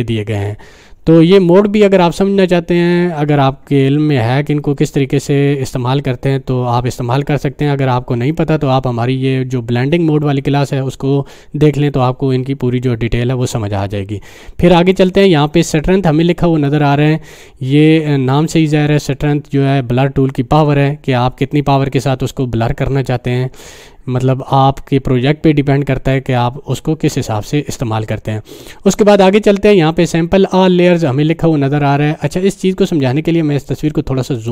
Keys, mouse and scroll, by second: 14.9 click, 33.7-34.5 drag.